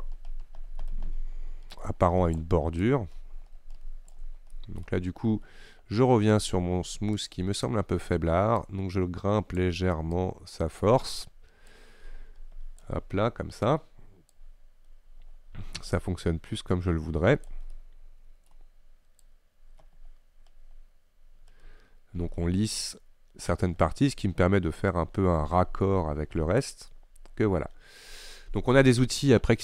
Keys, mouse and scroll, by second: 2.9-4.6 shift+drag, 4.6-7.3 middle drag, 7.3-17.5 drag, 17.8 middle click, 18.6-19.3 scroll up 1, 19.3-22.3 drag, 27.0-28.7 middle drag, 28.7-29.6 scroll up 1.